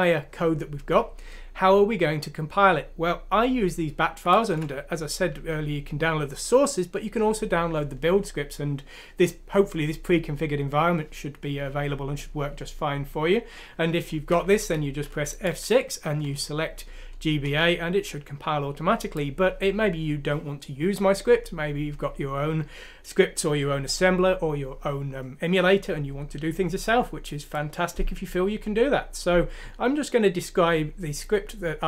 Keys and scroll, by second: 4.5 F6, 14.5 Escape, 15.4 F6, 17.4 Return.